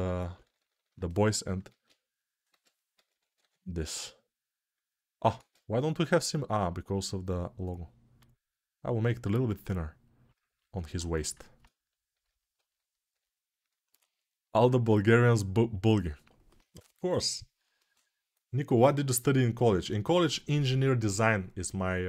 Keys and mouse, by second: 1.6 alt+q, 2.2 g, 2.7 ], 10.7 1.